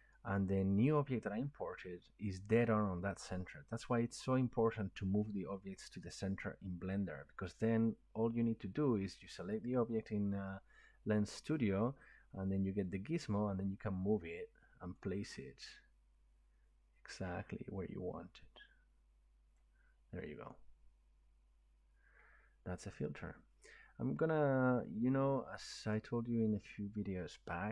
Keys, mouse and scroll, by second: 9.6 click, 11.2 click, 14.9 click, 19.5 click, 26.0 click, 26.7 click.